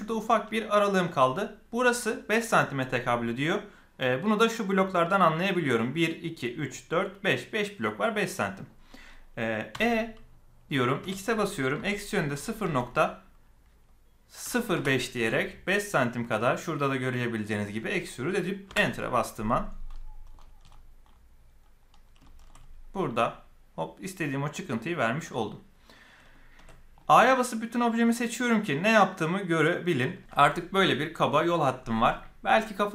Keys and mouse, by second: 9.7 e, 19.9 middle click, 22.2 shift+middle click, 25.3-26.3 shift+middle drag, 26.5 a, 26.9-29.9 middle drag, 30.2 middle click.